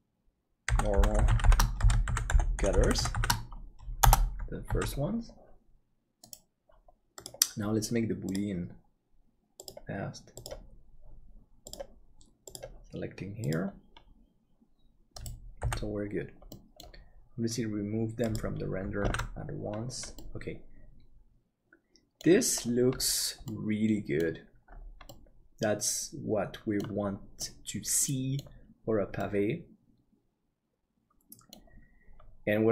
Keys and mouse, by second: 2.7 shift+t, 4.9 ctrl+s, 7.8-15.6 drag, 15.6 h, 16.5 middle click, 19.2 ctrl+s, 20.1-22.1 middle drag, 23.4 middle click, 25.1-26.9 middle drag, 27.3-28.3 middle drag, 29.1-31.5 middle drag.